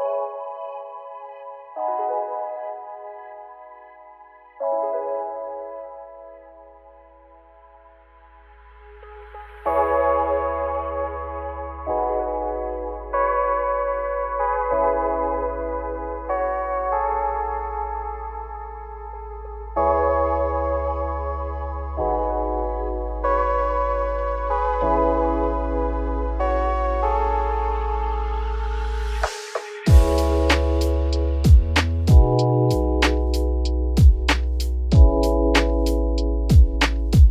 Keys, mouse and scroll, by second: 3.7 ctrl+z, 7.1-9.3 drag, 10.2-11.5 scroll down 5, 11.5 click, 12.4 middle click, 13.0 scroll up 4, 14.4-18.3 middle drag, 18.3-19.6 scroll up 3, 19.6-21.4 middle drag, 21.4 x, 21.9 scroll down 2, 22.1 `, 23.0 z, 23.9 scroll up 5, 25.1 click, 25.8-27.0 scroll up 6, 26.2 shift+middle drag, 27.6-29.4 drag, 29.4 `, 30.1 z, 31.7 click, 33.6-34.9 middle drag, 34.9-35.6 drag, 36.3-37.3 drag.